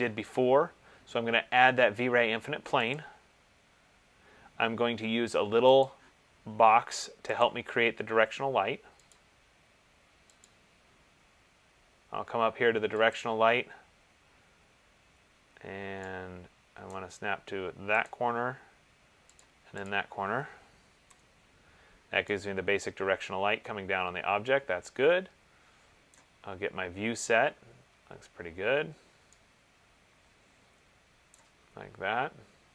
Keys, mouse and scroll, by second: 3.3 click, 6.0 click, 7.8 click, 9.3 click, 13.4 click, 17.1 right click, 18.3 click, 19.6 click, 20.2 click, 21.3 BackSpace, 26.2 right click, 27.2 middle click, 28.0 middle click, 29.3 middle click, 31.5 right click, 32.3 middle click.